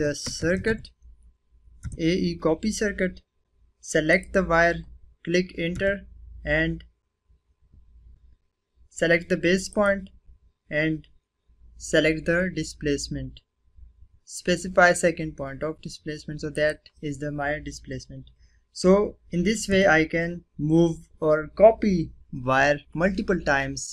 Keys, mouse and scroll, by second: 0.0-1.2 typing, 1.8 Return, 4.1 click, 5.7 Return, 9.7 click, 16.5 click, 19.6 Return.